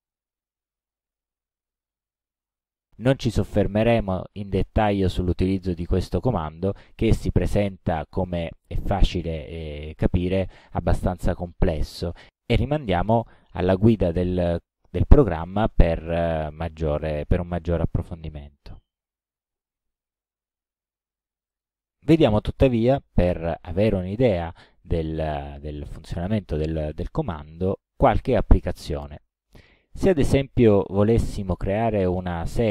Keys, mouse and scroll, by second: 6.1 click, 6.9 click, 7.7 click, 8.3 click, 16.1-16.6 scroll down 2, 16.9 scroll down 2, 17.5-17.9 scroll down 1, 18.2-18.5 scroll down 1.